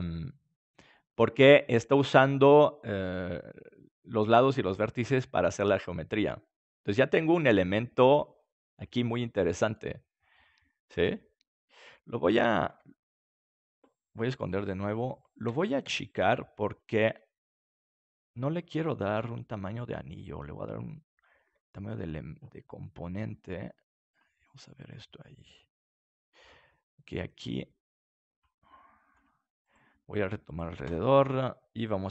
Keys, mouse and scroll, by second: 5.2 middle click, 12.7 Tab, 14.4-17.0 drag, 15.4 a, 15.8 a, 17.0 s, 21.0-23.3 drag, 21.5 Tab, 24.0-26.3 drag, 26.3 Tab, 28.2-30.4 drag, 29.6-32.1 right drag.